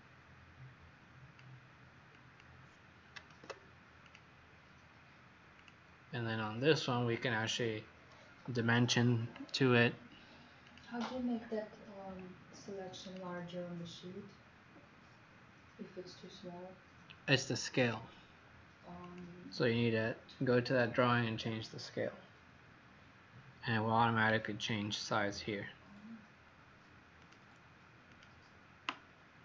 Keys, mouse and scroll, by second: 3.3 ctrl+z, 4.0 click, 6.5-6.8 scroll up 5, 7.7-8.0 scroll down 3, 10.6 click, 24.4-24.9 scroll down 4, 27.2 click.